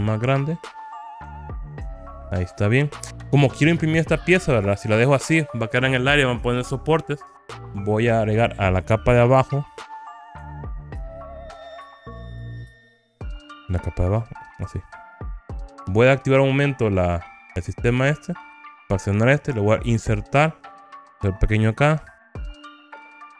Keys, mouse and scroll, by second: 2.7 click, 3.4 click, 4.0-5.1 middle drag, 10.0 click, 11.2 alt+z, 12.8-15.2 middle drag, 16.9 click, 18.1 click, 20.1 i, 23.1 click.